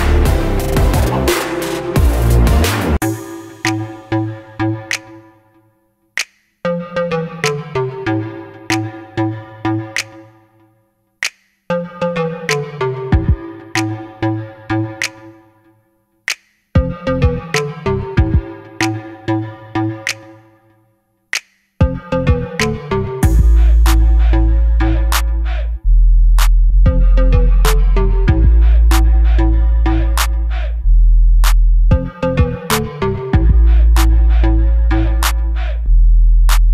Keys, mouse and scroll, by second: 0.7 click, 0.9 g, 3.3 click, 3.5 g, 4.3 click, 4.5-7.1 middle drag, 7.0 Tab, 7.1 click, 7.3-10.2 middle drag, 10.2 shift+right click, 10.5 KP_2, 11.1 KP_1, 11.7-12.7 scroll up 1, 13.6 shift+right click, 14.1 KP_3, 14.6-15.1 scroll down 1, 16.0 shift+right click, 16.5 shift+a, 18.7 r, 22.6 click, 22.8-24.1 middle drag, 23.1 scroll down 1, 23.4 s, 24.1 click, 24.5 KP_Decimal, 24.8 scroll down 1, 25.1-28.5 middle drag, 25.8 scroll down 1, 26.7 s, 27.5 Escape, 27.7 s, 28.5 click, 28.9 KP_7, 29.3-29.7 scroll up 1, 29.7 g, 31.1 click, 31.8-33.1 middle drag, 31.8-32.3 scroll down 1, 32.3 g, 33.1 click, 33.2 s, 34.3 click, 34.5 scroll down 1, 34.7-36.7 middle drag, 35.5 scroll up 1, 36.4 r.